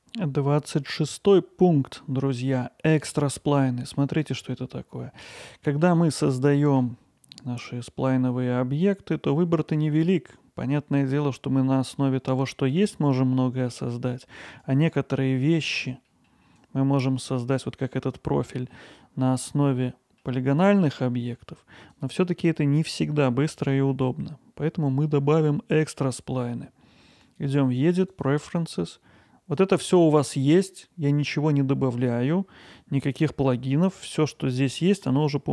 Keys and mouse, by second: 1.0-4.0 middle drag, 5.6 middle click, 6.3 shift+a, 14.6 click, 15.2-15.6 middle drag, 16.7-18.3 drag, 18.9-20.2 middle drag, 27.3-35.5 drag.